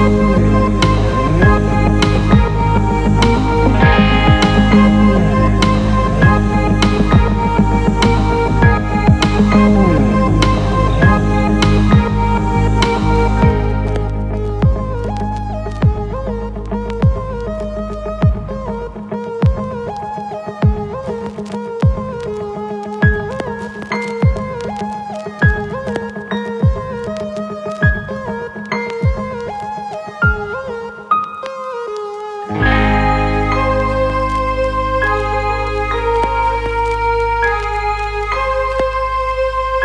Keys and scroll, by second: 27.8 ctrl+alt+z, 35.0 ctrl+z, 39.2 ctrl+alt+z.